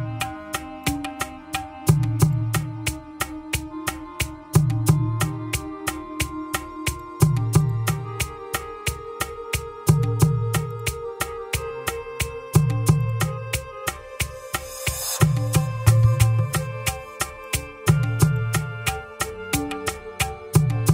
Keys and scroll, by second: 16.6 ctrl+c, 19.4 ctrl+v, 20.6 Return.